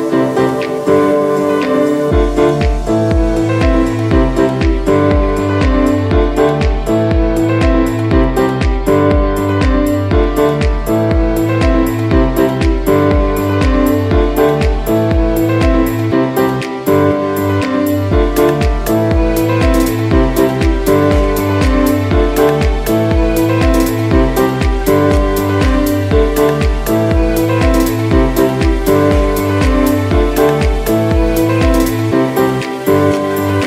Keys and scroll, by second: 5.5 v, 6.3 super+x, 7.0 super+x, 7.4 super+x, 9.0 super+x, 9.9 super+x, 21.5 v, 25.6 super+d, 26.3 z, 27.5 v, 28.7 super+g, 31.6 super+y, 32.1 v, 33.5 z.